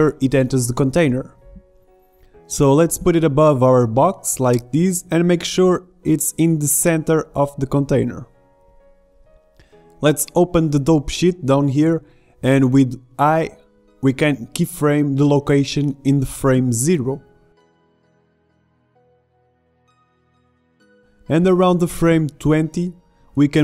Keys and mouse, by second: 1.3 click, 2.3 click, 3.2-6.4 middle drag, 6.4 click, 11.5 click, 12.6 click, 12.7-14.5 middle drag, 14.5-16.8 drag, 17.4 i, 22.4-23.6 drag.